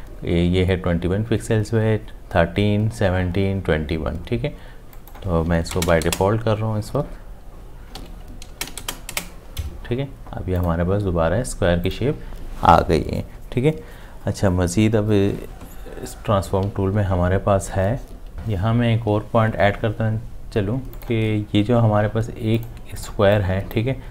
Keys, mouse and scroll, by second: 5.7 0, 5.9 Tab, 8.5 0, 8.7 Tab, 9.1 Return, 9.1 0.